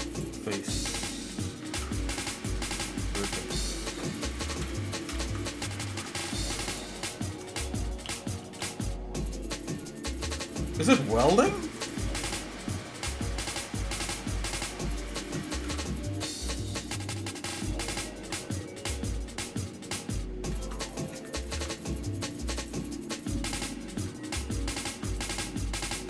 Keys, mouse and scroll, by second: 0.5 shift+middle click, 1.2 shift+middle click, 1.7 ctrl+Tab, 3.0 click, 3.8 click, 4.5 ctrl+KP_Add, 4.8 ctrl+KP_Add, 5.2 ctrl+KP_Add, 5.9 ctrl+Tab, 7.0 shift+middle click, 8.1 s, 12.3 shift+middle click, 13.2 scroll up 1, 14.0-14.3 scroll down 2, 14.6 scroll up 1, 15.5 ctrl+Tab, 18.3 ctrl+KP_Subtract, 20.5 ctrl+KP_Add, 21.4 ctrl+Tab, 24.8 ctrl+r.